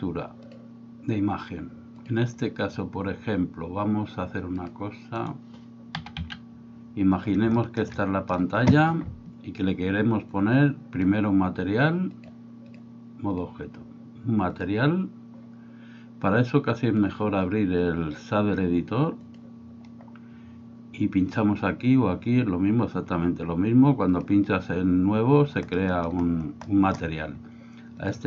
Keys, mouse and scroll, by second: 0.5-2.1 drag, 5.2 right click, 6.1 s, 7.6 middle click, 10.3 click, 12.2 click, 12.7 click, 16.9-19.3 drag, 24.1 click, 25.8 middle click, 26.8 middle click, 28.0 click.